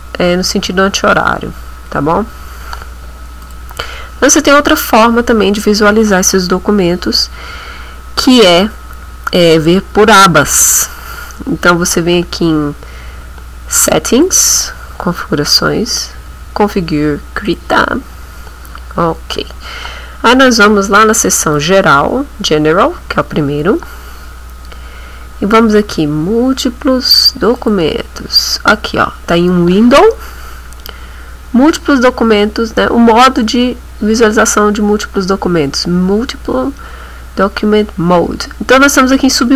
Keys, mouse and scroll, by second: 3.4 click, 14.1 click, 17.5 click, 21.5 click, 27.6 click, 39.3 click.